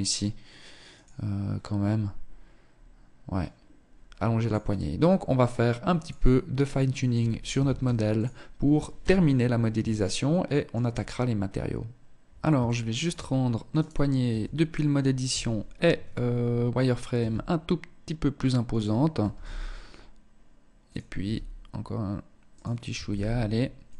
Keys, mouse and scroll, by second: 6.1 click, 7.3 ctrl+s, 8.0 KP_1, 9.0 shift+middle click, 11.7 shift+middle click, 12.3-12.9 scroll up 1, 12.9 right click, 12.9-13.5 scroll up 2, 13.5 Tab, 14.3 z, 15.5 scroll up 2, 16.3 s, 18.3 g, 20.3 s, 22.0 g, 23.2 Tab, 23.5-23.9 scroll down 6.